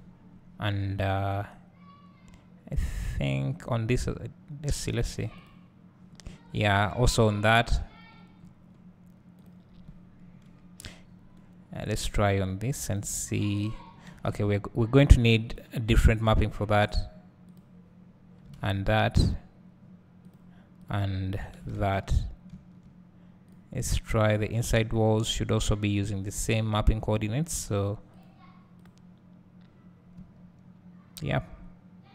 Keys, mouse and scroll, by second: 0.3 scroll down 1, 5.1-9.5 drag, 6.3 scroll up 2, 7.1 scroll down 1, 7.6 scroll up 1, 8.1 scroll down 1, 10.2 KP_Decimal, 11.0 scroll up 1, 12.5-15.7 drag, 14.7 ctrl+z, 17.1-19.3 drag, 18.9 z, 20.5-23.6 drag, 22.1 ctrl+z, 22.5 `, 23.7 click, 26.0 `, 27.1 click, 28.4-32.1 drag, 30.1 `.